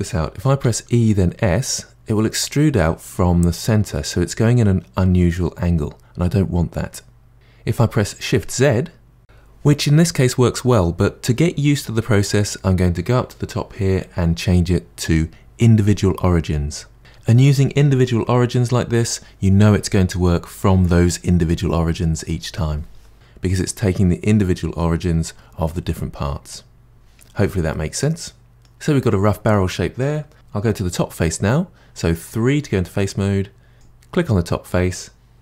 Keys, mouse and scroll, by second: 0.6 e, 13.3 ctrl+z, 13.7-16.2 drag, 16.9 e, 27.7 middle click, 29.5 middle click, 30.3 3, 33.7 click.